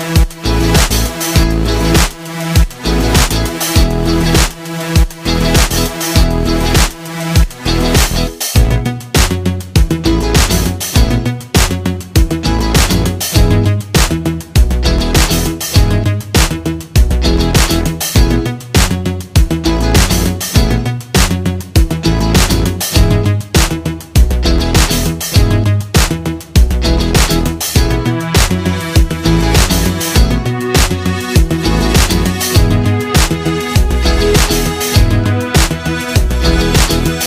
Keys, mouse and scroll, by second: 11.9 typing, 20.7-23.6 drag, 20.7 typing, 26.0 typing, 28.9 click.